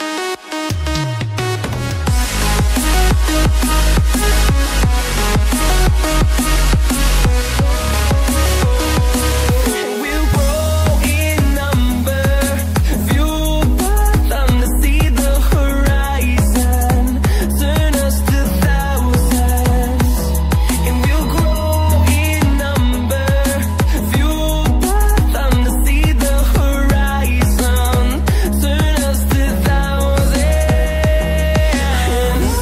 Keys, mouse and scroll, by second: 1.1 scroll up 1, 1.5 click, 4.6 double click, 5.9 Left, 6.3 Left, 6.5 Left, 6.6 Left, 6.8 Left, 7.0 Left, 7.3 Left, 7.4 Left, 8.8 click, 10.7 Left, 10.7 click, 12.0 Up, 12.0 Left, 13.0 Up, 13.3 Up, 13.5 Up, 14.4 Left, 14.5-15.1 Up, 15.3 Up, 15.5 Up, 15.7 Up, 15.8 Up, 15.9 Up, 16.2 Right, 16.4 Right, 16.5 Right, 16.6 Right, 17.6 Right, 19.7 click.